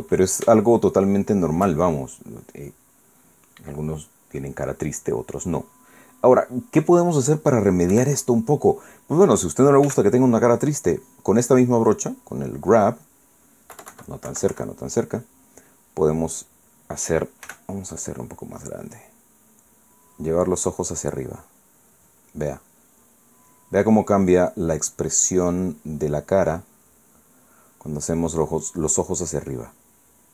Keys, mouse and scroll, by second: 0.3 KP_1, 1.5-2.5 shift+middle drag, 3.5-4.7 middle drag, 5.1-6.7 middle drag, 7.0-8.1 middle drag, 8.9 KP_1, 10.8 f, 12.2 click, 13.0 scroll up 2, 14.7 KP_Subtract, 18.4 f, 19.0 click, 19.9-22.6 drag, 23.8-25.5 drag, 26.1 click, 27.3 click, 29.9-30.3 middle drag.